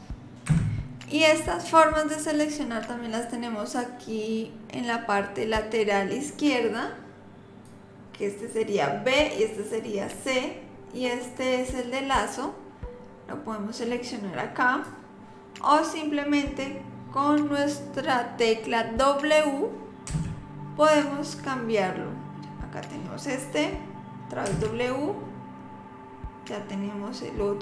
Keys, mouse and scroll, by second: 1.0 click, 7.7 click, 20.1 w, 24.5 w.